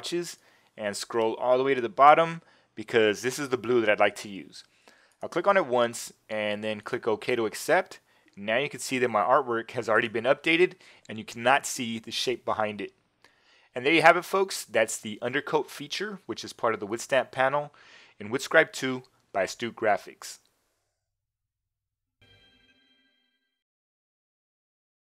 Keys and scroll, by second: 8.7 Return.